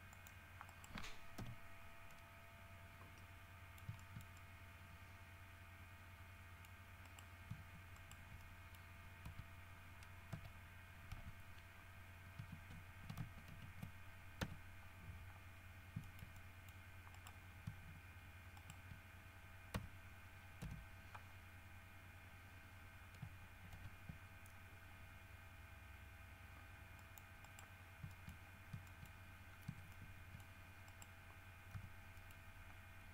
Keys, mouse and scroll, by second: 0.3 click, 0.9 right click, 1.6 l, 2.0 scroll down 1, 2.3-3.9 middle drag, 5.1-7.0 middle drag, 7.2 right click, 8.1 shift+middle click, 8.6 shift+middle click, 9.5 a, 10.5 w, 11.4 Escape, 13.7 ctrl+shift+v, 14.6 d, 15.7 scroll down 2, 16.2 shift+middle click, 17.3 shift+right click, 18.8 shift+right click, 19.9 f, 20.8 KP_3, 23.9 ctrl+r, 24.7-25.3 ctrl+scroll up 5, 25.8 scroll up 2, 27.2 middle click, 27.7 right click, 28.3 shift+middle click, 28.5-29.5 shift+scroll up 3, 29.1 shift+middle click, 29.7 shift+scroll down 1, 30.1 shift+middle click, 30.6 shift+scroll up 1, 31.1 shift+right click, 31.9 g, 32.4 middle click.